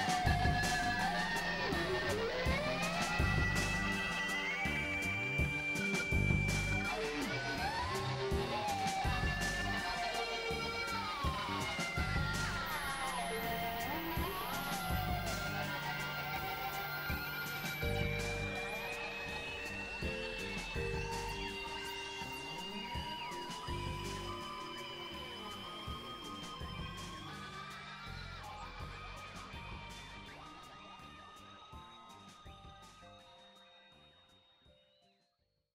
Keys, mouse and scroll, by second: 0.5 click, 2.2 ctrl+z, 3.2-4.3 middle drag, 4.3-5.2 drag, 6.2-7.5 drag, 8.3 click, 9.0 click, 9.5 click, 10.3-12.7 drag, 13.5 click, 15.5 middle click, 16.3 KP_Divide, 17.2 click, 18.9 middle click, 19.6-21.0 middle drag, 21.7 KP_7, 22.5 click, 24.5 click, 25.2-26.7 drag, 27.5 click, 29.3 click, 30.9 click, 33.1 click.